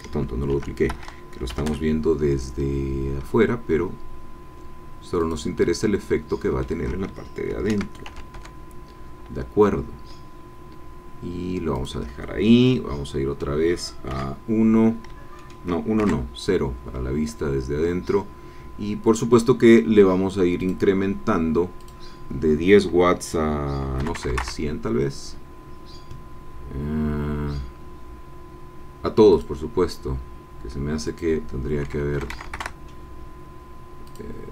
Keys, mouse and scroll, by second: 0.7 shift+d, 0.9 Escape, 1.5 g, 1.6 y, 5.2 shift+click, 5.5-6.8 shift+middle drag, 7.5 shift+d, 8.0 shift+g, 8.3 shift+y, 11.8 shift+click, 12.7 middle click, 14.1 KP_1, 15.4 shift+middle click, 16.0 shift+KP_0, 17.6-18.0 shift+scroll up 3, 18.6 scroll down 2, 20.7 click, 21.8 click, 23.9 KP_1, 24.1 KP_0, 24.3 KP_Enter, 27.4 scroll down 2, 28.2 scroll down 2, 29.3 click, 31.0-32.1 drag, 32.1 KP_1, 32.3 KP_0, 32.5 KP_Enter, 34.3 click.